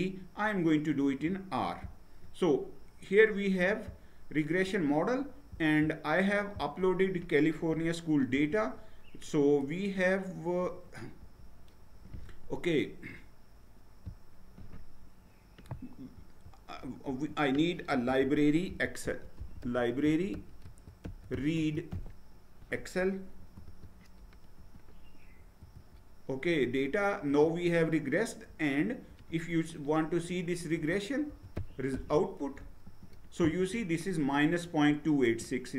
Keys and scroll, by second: 8.4 ctrl+Return, 11.2 ctrl+Return, 16.1 Up, 17.0 Return, 18.0 Up, 18.4-22.4 typing, 23.4 Down, 23.7 Tab, 24.6 ctrl+Return, 25.7 ctrl+Return, 27.3 ctrl+Return, 30.7 Up, 31.3-31.9 typing, 32.8 ctrl+Return.